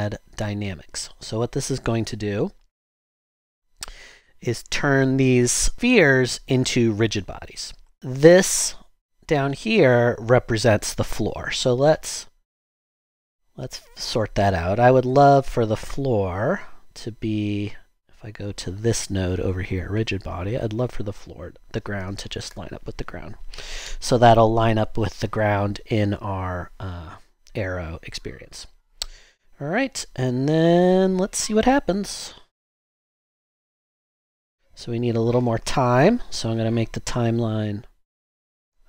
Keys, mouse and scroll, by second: 3.4 typing, 22.0-22.5 typing, 22.5 Return, 32.8 typing, 33.4 Return, 34.0 typing, 36.3 typing, 38.3-38.8 typing.